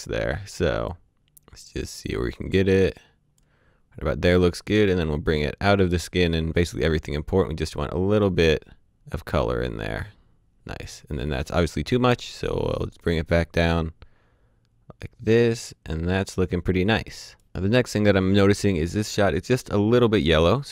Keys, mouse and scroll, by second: 0.0 click, 4.8 click, 20.4 click.